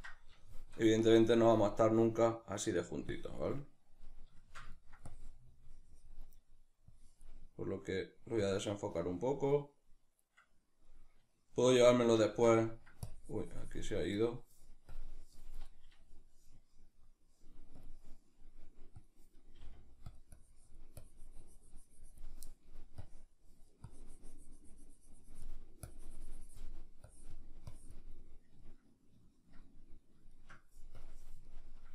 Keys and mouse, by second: 1.1-2.4 drag, 2.4 middle click, 3.2 click, 4.0-5.2 middle drag, 5.2-11.0 drag, 11.0-13.1 middle drag, 13.1-19.5 drag, 19.5 f, 20.2 click, 28.6-31.0 ctrl+middle drag, 31.0 click, 31.5 ctrl+middle click.